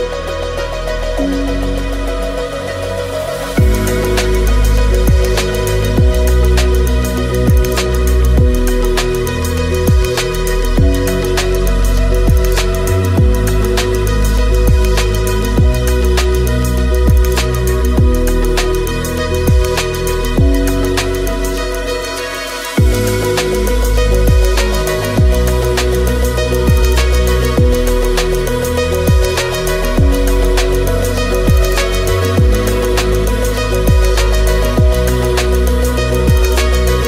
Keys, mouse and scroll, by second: 0.1 click, 1.3 click, 1.9 middle click, 2.8 middle click, 3.0 shift+middle click, 4.1 shift+middle click, 4.4 middle click, 5.0 click, 5.6 click, 6.4 click, 7.1 click, 7.3 click, 9.1 shift+click, 10.2 click, 10.9 click, 13.6 shift+middle click, 14.1 shift+middle click, 15.5 click, 16.1 click, 17.0 g, 17.4 click, 17.9 click, 18.1 middle click, 18.5 click, 19.3 click, 20.1 click, 22.4 click, 22.9 shift+middle click, 24.0 click, 25.1 shift+middle click, 25.2 click, 25.6 shift+click, 26.2 click, 26.7 shift+s, 27.4 click, 27.8 middle click, 28.3 click, 29.1 alt+d, 29.4 middle click, 29.4 Delete, 29.9 middle click, 30.2 shift+s, 30.4 click, 30.9 click, 31.3 click, 32.2 click, 33.4 click, 33.7 shift+a, 34.6 click, 34.8 click, 35.1 shift+click, 35.9 click, 36.4 shift+click.